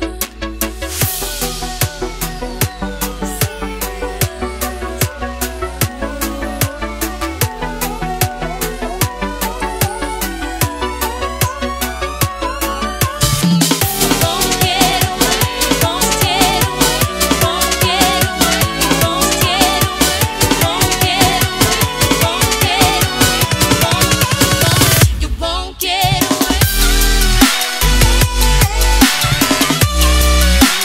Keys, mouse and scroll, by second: 3.7 0, 4.3 click, 5.7 0, 6.5 click, 9.2 Return, 13.1 Delete, 13.9 click.